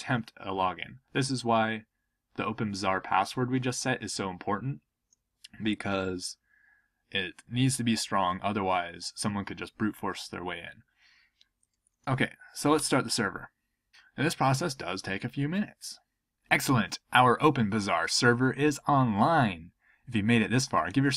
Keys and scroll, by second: 12.7 Return.